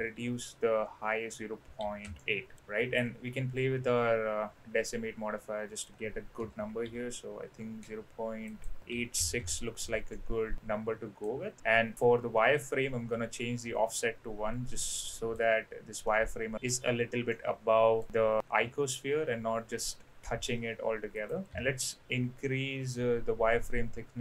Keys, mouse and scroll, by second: 3.0-5.9 drag, 6.4 KP_0, 6.6 KP_Decimal, 6.8 KP_8, 7.8 KP_6, 8.5-9.8 drag, 10.1-11.2 middle drag, 12.6-13.7 drag, 14.0-15.4 middle drag, 16.0-16.6 middle drag, 17.3-18.0 middle drag, 18.1-18.4 middle drag, 21.1-23.8 drag.